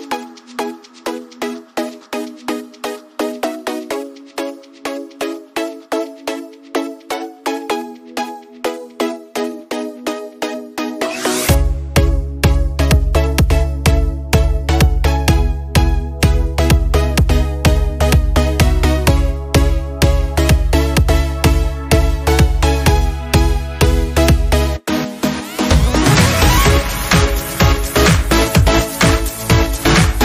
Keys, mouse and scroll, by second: 0.1 click, 4.4 click, 7.0-10.3 scroll down 1, 10.5 click, 14.2 click, 24.9 scroll up 1, 25.6 scroll down 1, 27.5 scroll up 1.